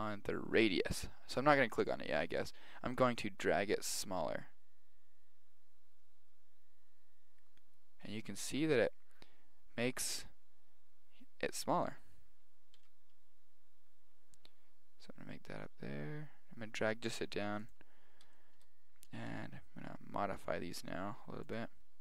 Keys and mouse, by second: 3.0 click, 4.9 click, 12.7 g, 18.0-19.1 middle drag, 19.1 right click, 19.3 g.